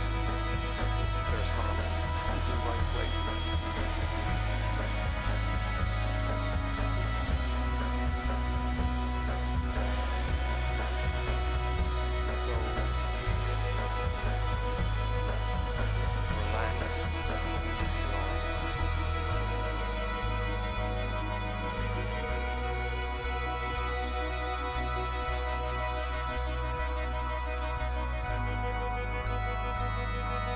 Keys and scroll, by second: 1.5 super+=, 7.7 super+i, 18.3 alt+super+a, 18.5 super+c, 24.0 super+i, 28.3 super+-, 29.1 super+=.